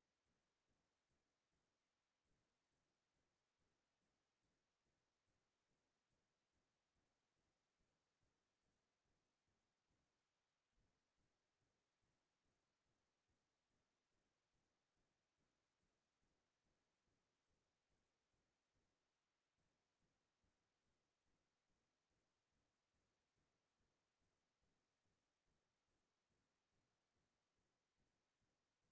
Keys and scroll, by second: 3.1 ctrl+space, 9.9 alt+Right, 14.2 ctrl+z, 14.4 ctrl+z, 14.5 ctrl+z, 14.7 ctrl+z, 15.0 ctrl+z, 15.2 ctrl+z, 15.3 ctrl+z, 15.5 ctrl+z, 15.7 ctrl+z, 15.8 ctrl+z, 16.7 ctrl+z, 16.9 ctrl+z, 17.1 ctrl+z, 17.3 ctrl+z, 17.5 ctrl+z, 17.7 ctrl+z, 17.8 ctrl+z, 18.0 typing, 24.7 alt+Right.